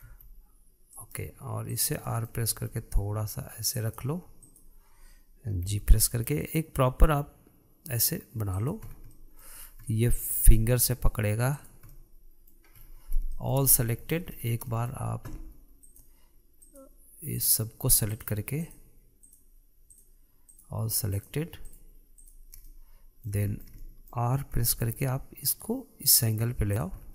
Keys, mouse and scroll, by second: 0.6 r, 2.3 click, 2.6-3.1 middle drag, 3.1 r, 5.0 drag, 6.2 g, 9.4 scroll down 1, 9.7-10.1 middle drag, 10.1 scroll up 4, 10.4-10.9 middle drag, 10.9 scroll down 1, 11.1-12.1 middle drag, 12.1 click, 12.5-13.3 middle drag, 13.3-13.9 scroll up 2, 13.9-16.4 shift+middle drag, 16.4 shift+click, 17.2 shift+click, 17.9 shift+click, 18.7 shift+click, 19.2 shift+drag, 19.8 shift+drag, 20.5 shift+click, 21.1 shift+drag, 21.7 shift+click, 22.2 shift+click, 22.7 shift+click, 23.2-25.1 middle drag, 25.1 r.